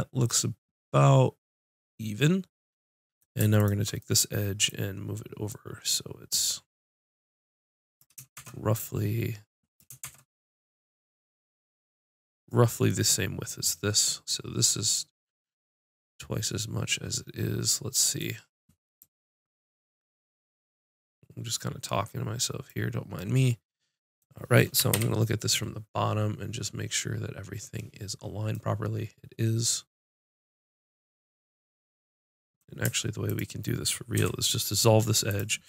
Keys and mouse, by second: 0.2 middle click, 1.7 middle click, 3.0 middle click, 3.5 right click, 4.0-5.4 drag, 5.5-7.3 drag, 8.3 shift+Tab, 8.7 click, 10.0 shift+Tab, 18.9-21.1 drag, 24.9 ctrl+KP_7, 28.5 middle click, 33.2 click, 34.1 x.